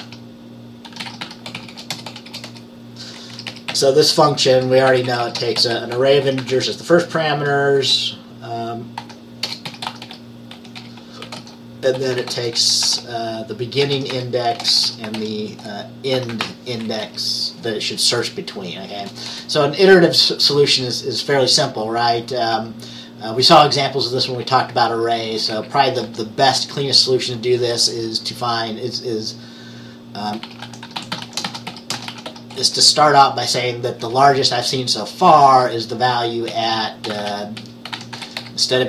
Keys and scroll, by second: 0.0-4.6 typing, 6.1-7.9 typing, 9.1-17.6 typing, 19.1 typing, 25.4-26.7 typing, 27.8 typing, 30.3-32.9 typing, 34.1 typing, 35.5 typing, 36.6-38.8 typing.